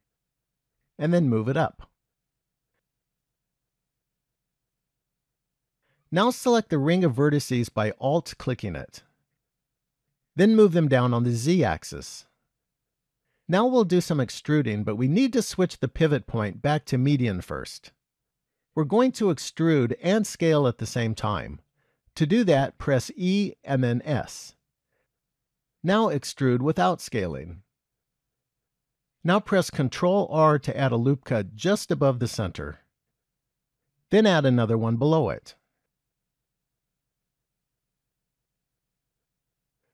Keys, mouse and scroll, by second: 1.4 g, 4.4 shift+middle click, 8.4 alt+click, 10.0 g, 13.1-15.4 scroll up 2, 15.4 click, 23.3 e, 26.6 e, 29.8 ctrl+r, 34.2 ctrl+r, 39.6-39.9 scroll up 3.